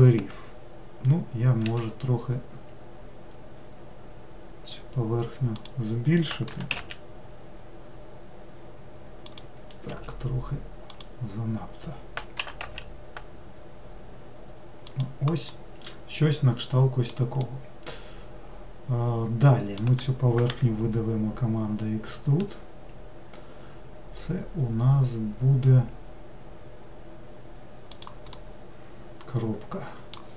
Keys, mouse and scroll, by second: 1.7 s, 6.6 g, 10.0 s, 12.5 g, 15.5-20.6 middle drag, 20.6 e, 28.4-30.3 middle drag.